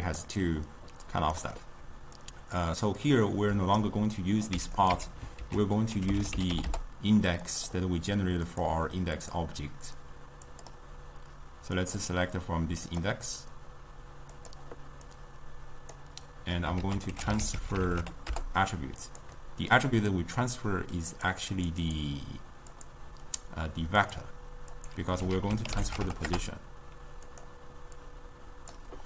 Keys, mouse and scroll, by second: 0.0-0.3 typing, 0.1 click, 0.5-1.5 right drag, 1.5 d, 2.0 d, 2.3-4.6 drag, 4.6 x, 4.8 click, 5.0 x, 5.5 ctrl+a, 8.6 click, 9.3 click, 10.6 click, 11.8 click, 14.4 click, 15.2-16.9 drag, 16.9 ctrl+a, 19.5-20.2 middle drag, 20.2-21.7 drag, 21.9-25.4 drag, 25.4 ctrl+a, 28.1-29.0 drag.